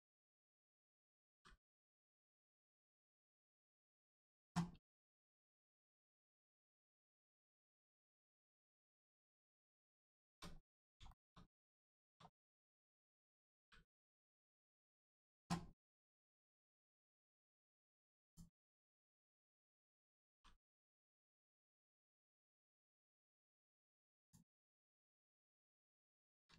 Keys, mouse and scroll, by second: 0.1 click, 1.3 g, 2.2 click, 5.0 click, 5.8 middle click, 7.0 shift+middle click, 7.3 middle click, 7.4 middle click, 7.9 shift+middle click, 8.2 middle click, 8.3 middle click, 9.0 click, 10.6 middle click, 11.0 shift+middle click, 11.5 scroll down 1, 11.9 shift+middle click, 12.2 middle click, 12.3 middle click, 13.5 g, 14.8 click, 16.1 middle click, 17.2 click, 19.0 middle click, 20.3 g, 21.3 click, 23.2 middle click, 24.2 click, 24.6 middle click, 25.4 shift+middle click.